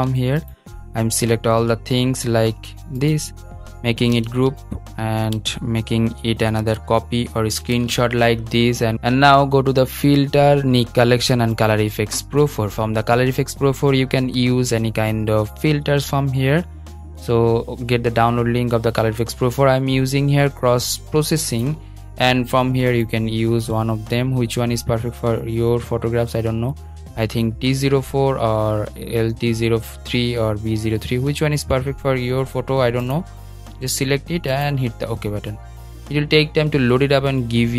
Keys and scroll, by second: 3.8 shift+super+g.